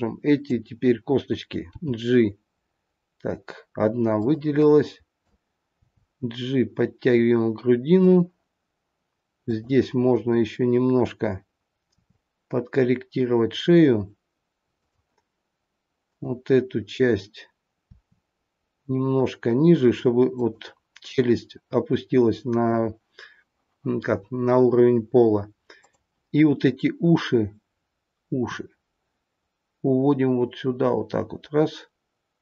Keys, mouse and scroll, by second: 1.7 g, 4.5 click, 5.7 g, 9.4 click, 11.9 r, 15.9 click, 17.8 r, 25.7 click, 28.3 r.